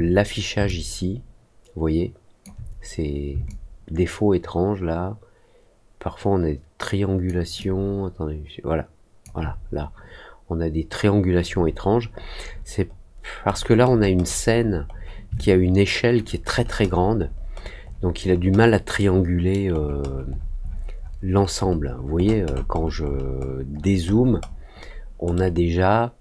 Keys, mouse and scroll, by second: 0.6-2.4 alt+drag, 3.4-7.2 alt+drag, 7.5-9.2 alt+drag, 12.0-13.0 scroll down 3, 13.4-14.0 scroll down 2, 14.1 middle click, 14.5 middle click, 14.8 middle click, 15.3 alt+click, 16.1 alt+middle click, 16.4 alt+middle click, 16.8 alt+middle click, 17.1 alt+middle click, 17.5 alt+middle click, 17.8 alt+middle click, 18.1 alt+middle click, 18.5 alt+scroll down 1, 18.9 alt+middle click, 19.7-21.1 alt+scroll down 5, 21.2 alt+middle click, 21.5 alt+middle click, 21.8 alt+middle click, 22.1 alt+middle click, 22.4 alt+middle click, 22.7 alt+middle click, 23.0 alt+middle click, 23.3 alt+middle click, 23.7-24.9 alt+scroll down 4, 25.3-26.2 alt+middle drag.